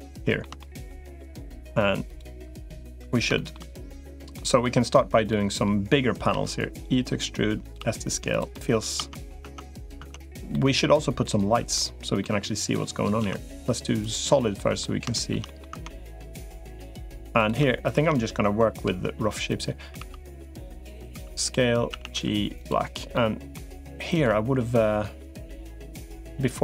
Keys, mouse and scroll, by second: 0.4 shift+middle click, 0.8 middle click, 3.1 shift+middle click, 3.9 middle click, 5.1 middle click, 6.2 e, 7.6 s, 8.3 middle click, 8.8 Tab, 9.2 Tab, 9.8 Tab, 10.3-11.5 middle drag, 12.0 middle click, 13.0 z, 14.4 middle click, 14.9 middle click, 15.3 middle click, 15.6 Tab, 16.3 middle click, 17.2 click, 18.6 i, 19.8 e, 21.0 s, 21.8 a, 22.0 g, 22.9 middle click.